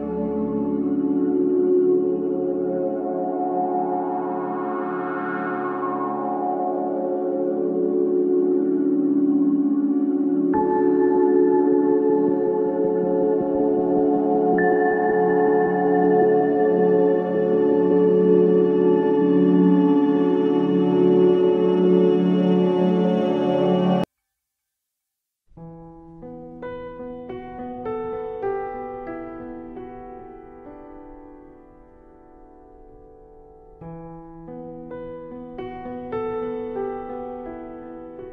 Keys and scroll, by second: 0.0 ctrl+z, 1.4 alt+space, 2.5 ctrl+z, 4.6 ctrl+r, 6.3 ctrl+z, 8.4 ctrl+z, 12.1 ctrl+z, 13.5 ctrl+z, 15.6 ctrl+z, 19.4 ctrl+z, 19.9 ctrl+z, 20.3 ctrl+z, 21.3 ctrl+z, 21.7 ctrl+z, 25.1 ctrl+z, 26.2 ctrl+z, 26.3 ctrl+e, 26.5 ctrl+space, 26.8 ctrl+z, 27.1 ctrl+z, 28.3 ctrl+z, 29.4 ctrl+t, 31.6 ctrl+d, 32.8 ctrl+d, 33.0 ctrl+t, 35.4 ctrl+z, 35.8 ctrl+z.